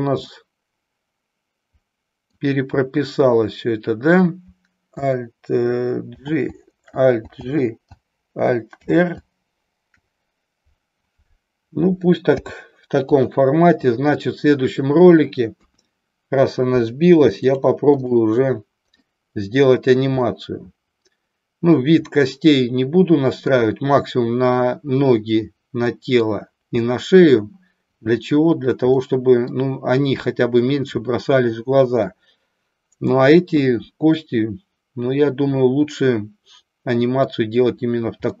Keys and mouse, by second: 0.3-2.4 middle drag, 17.5 click, 18.3 click, 19.2-20.0 middle drag, 20.4-23.5 middle drag, 25.9 middle click, 29.0 middle click, 34.2-37.4 middle drag.